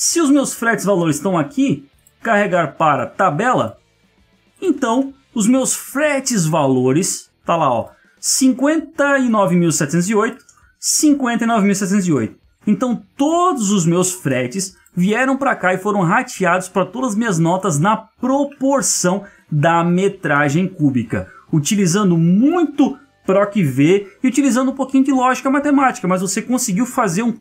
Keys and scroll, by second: 4.8 ctrl+space, 10.4 ctrl+space, 13.6 ctrl+-, 19.7 ctrl+Up, 20.3 ctrl+Left.